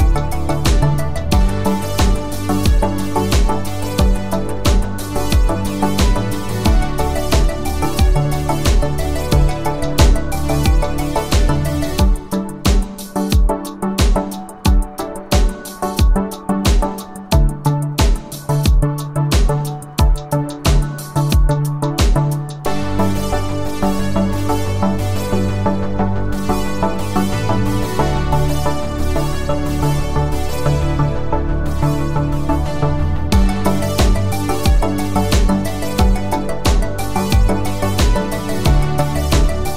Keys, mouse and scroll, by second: 0.5 click, 3.9 click, 5.6 click, 10.6 click, 13.3 click, 16.5 click, 23.8 click, 25.5 click, 28.7 click, 34.0 click.